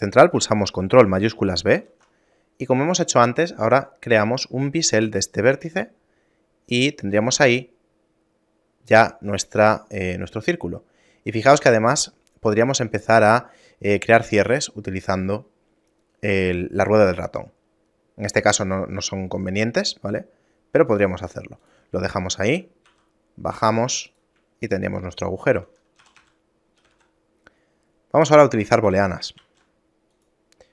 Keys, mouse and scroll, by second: 1.9 ctrl+shift+b, 22.3 shift+middle click, 23.0 e, 24.7 shift+middle click, 25.7 Tab, 26.1 a, 26.3 a, 26.9 g, 28.9 a, 29.5 shift+a.